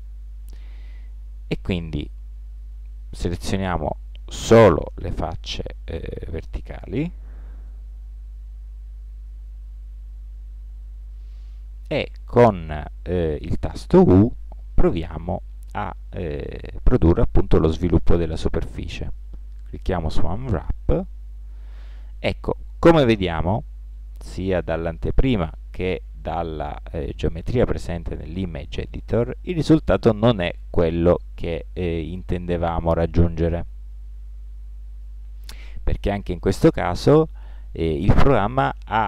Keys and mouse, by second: 1.6 ctrl+Tab, 5.0 middle click, 5.2 middle click, 7.3 z, 7.7 middle click, 8.5 middle click, 8.7 middle click, 10.0 z, 14.5 u, 28.6-39.0 middle drag.